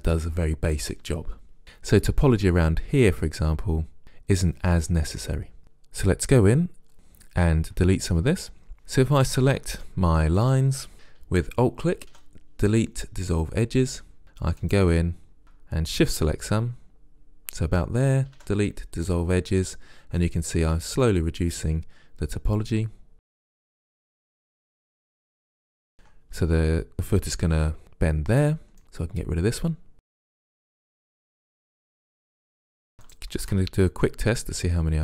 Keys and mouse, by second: 1.6-3.0 middle drag, 5.6-9.2 drag, 9.2-10.9 right drag, 12.1 Delete, 13.8 middle click, 14.8-17.0 right drag, 18.4 Delete, 19.8 middle click, 23.2-24.6 drag, 24.3 Delete, 24.7 middle click, 25.4 click, 25.5-26.9 middle drag, 28.8 middle click, 29.4 click, 30.2 Delete, 30.4 middle click, 31.0 right click, 31.4 middle click, 32.3 right click, 32.4-34.6 middle drag, 34.8-35.0 middle drag.